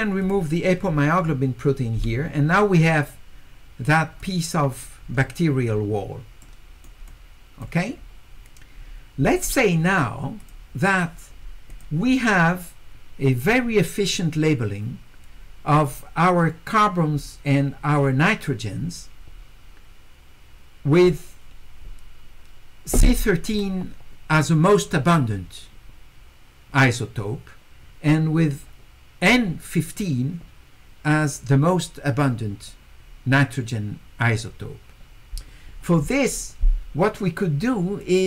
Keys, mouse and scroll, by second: 0.2 click, 4.2 click, 6.4 right click, 7.1 click, 10.4 click, 11.7 click, 38.0-38.2 drag.